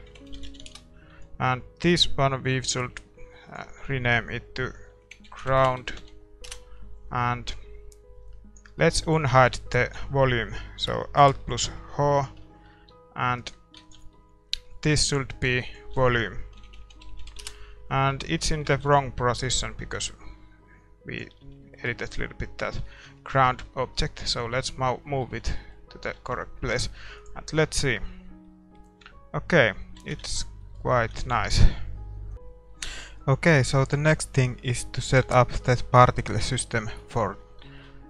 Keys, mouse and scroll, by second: 0.7-1.7 drag, 0.7 s, 1.7-6.4 right drag, 8.3-12.2 drag, 8.7-12.2 middle drag, 9.8 a, 12.2 alt+h, 12.9 a, 13.4-17.4 right drag, 13.8 ctrl+s, 14.1-17.4 middle drag, 17.4-18.4 drag, 18.4-20.0 middle drag, 19.5 ctrl+s, 19.5-21.6 drag, 21.6-27.6 middle drag, 26.2 shift+z, 27.2-29.1 drag, 28.4-32.0 middle drag, 30.1 shift+z, 30.6 ctrl+s, 30.9 a, 32.3 middle click, 32.3 shift+z, 33.1-35.2 middle drag, 35.3 shift+z, 35.5-38.0 middle drag, 36.3-38.0 right drag.